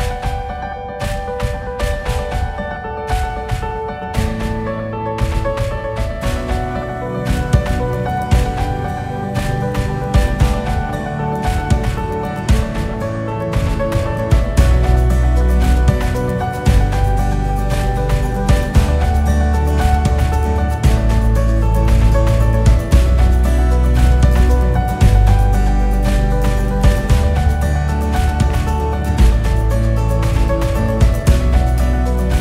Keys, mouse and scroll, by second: 0.0 click, 0.5 scroll up 2, 0.7 scroll down 1, 1.3 Tab, 2.1 KP_8, 2.9-7.8 KP_6, 8.8 click, 10.0 e, 13.4 s, 16.5 click, 17.2 scroll up 2, 17.6-18.2 scroll down 1, 18.2-25.6 KP_6, 25.9 KP_6, 26.4-26.8 scroll down 1, 26.8-27.7 scroll up 1, 27.7 shift+a, 31.5 g.